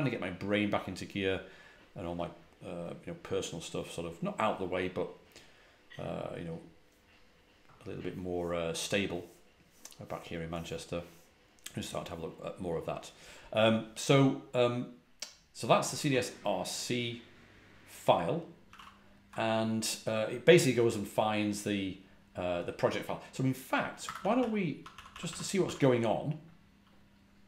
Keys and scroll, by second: 18.6 ctrl+a, 18.7 ctrl+l, 24.0 Escape, 24.1-24.6 typing, 27.1-27.4 typing.